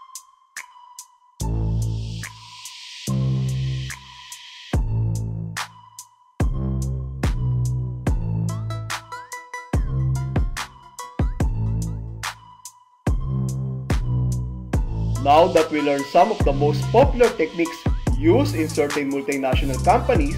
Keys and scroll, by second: 3.7 Return, 5.5 alt+c, 7.3 alt+a, 8.1 Return, 9.1 Tab, 10.4 Tab, 12.1 Left, 14.1 Left.